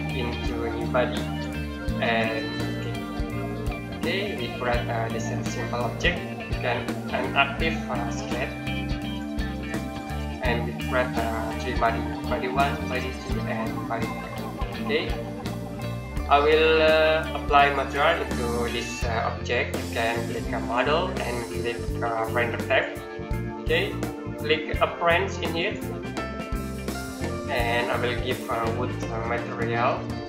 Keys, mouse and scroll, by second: 3.3 middle click, 3.7-4.1 scroll down 1, 4.1-5.1 scroll up 1, 5.1 middle click, 8.0 click, 14.8 middle click, 15.1 scroll down 1, 15.5-16.3 scroll up 1, 16.3 middle click, 20.4 click, 25.4 click, 26.5 middle click, 27.0-27.4 scroll up 1, 27.4-29.1 scroll down 1.